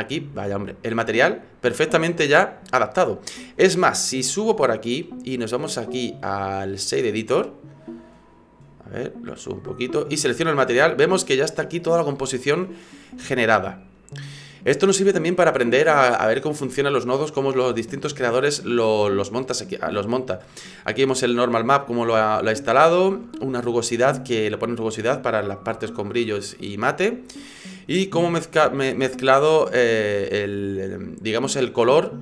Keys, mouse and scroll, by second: 1.0 click, 4.5 click.